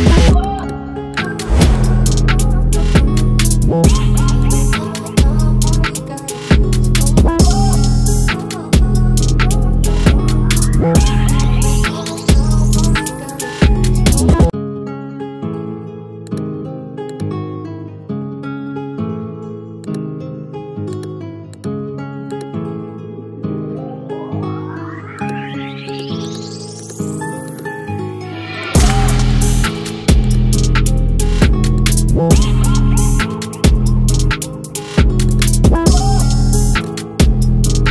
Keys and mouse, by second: 6.6 click, 8.9 click, 11.6 click, 13.4 click.